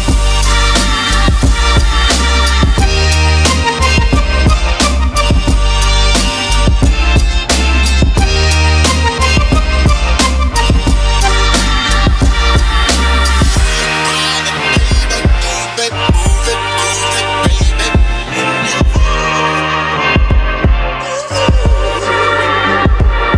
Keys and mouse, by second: 2.6-3.8 drag, 7.9 click, 9.3 click, 10.5 middle click, 13.1 middle click, 13.7 click, 15.1 click, 16.6-18.7 drag, 19.8 click, 22.5 click.